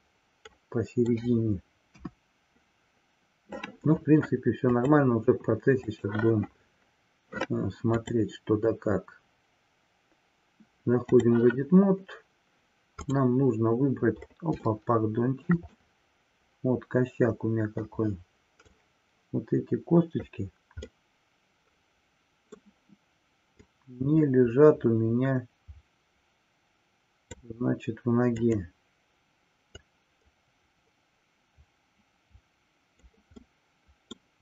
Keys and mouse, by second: 2.1 KP_1, 4.7-5.9 drag, 7.8-11.2 drag, 14.7-15.6 shift+middle drag, 15.8-17.9 middle drag, 18.8-20.3 drag, 20.9-22.6 middle drag, 23.6-27.3 drag, 28.3-29.1 drag, 29.7-33.1 drag, 33.5-34.3 middle drag.